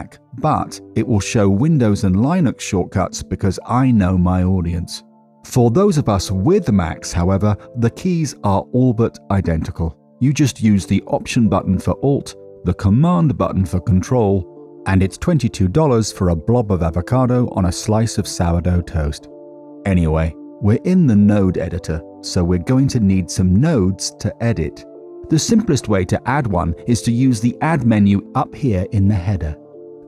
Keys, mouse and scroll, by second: 6.7 middle click, 7.5 middle click, 21.5 middle click, 22.1 middle click, 27.6-30.0 drag.